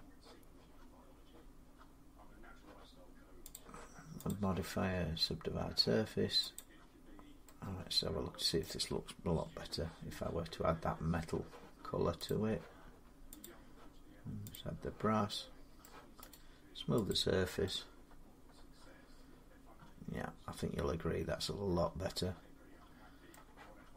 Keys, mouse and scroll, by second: 3.3 click, 4.1 click, 6.4 click, 8.4 middle click, 9.2 Tab, 12.1 click, 13.2 click, 14.3 click, 15.6 middle click, 16.1 right click, 16.9 click, 21.9 click, 23.1-23.9 middle drag, 23.8 Tab.